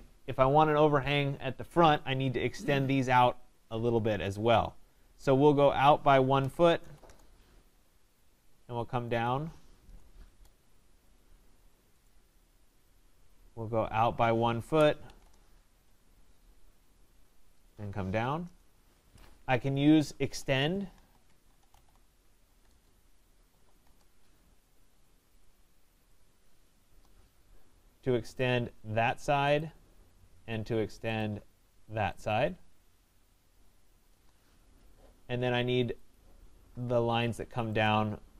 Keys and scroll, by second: 7.0 Return, 15.2 Return, 34.1 Return.